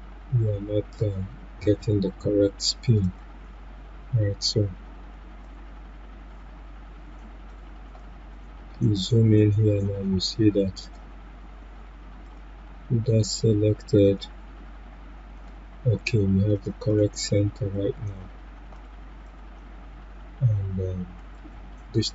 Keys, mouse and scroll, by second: 5.4-10.8 drag, 10.8-16.5 drag, 16.9 right click, 18.0 click.